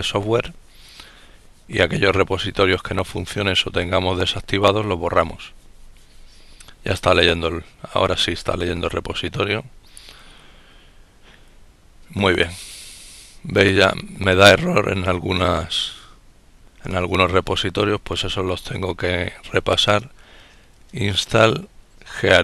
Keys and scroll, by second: 14.1-17.9 typing, 20.6-22.4 typing.